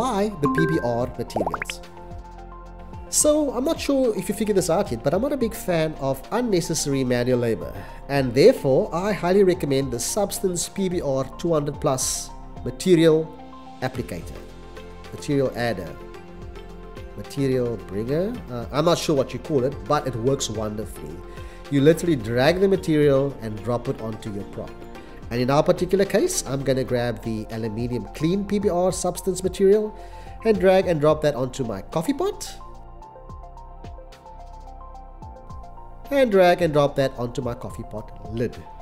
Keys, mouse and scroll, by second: 21.5 m, 22.5 e, 22.9 t, 23.2 a, 25.4 l, 25.8 Return.